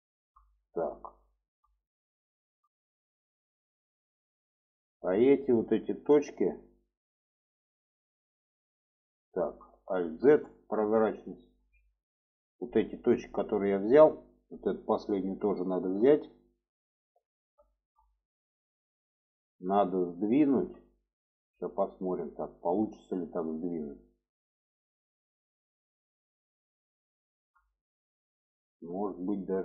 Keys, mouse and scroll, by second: 0.3 shift+middle click, 1.1 shift+middle click, 2.1 shift+middle click, 4.5-7.5 drag, 7.9 shift+middle click, 9.6 alt+z, 10.1 shift+middle click, 11.6-12.8 middle drag, 13.7 shift+middle click, 15.0 shift+click, 16.5 alt+middle click, 17.5 shift+middle click, 18.3 shift+middle click, 19.1 shift+middle click, 20.1 shift+middle click, 21.1 middle click, 22.2 shift+middle click, 22.6 middle click, 23.7-27.2 middle drag, 27.5 shift+middle click, 28.4 shift+middle click, 29.1 shift+middle click.